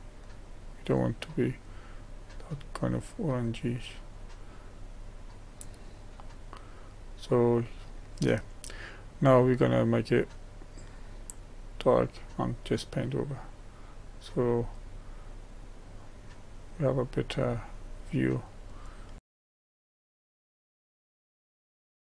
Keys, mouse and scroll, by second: 5.9-6.6 scroll down 1, 6.6-8.3 middle drag, 8.3-9.1 scroll up 1, 9.1-10.9 scroll up 1, 10.9-15.0 drag, 19.0 scroll down 1, 19.2 click, 19.3 shift+middle click, 19.4 click, 19.8 shift+middle click, 20.0 click, 20.3 middle click, 20.3 click, 20.6 shift+middle click, 20.7 click, 21.0 middle click, 21.2 middle click, 21.4 click, 21.6 shift+middle click, 21.6 click, 21.7 shift+middle click, 21.8 scroll down 1, 22.1 middle click.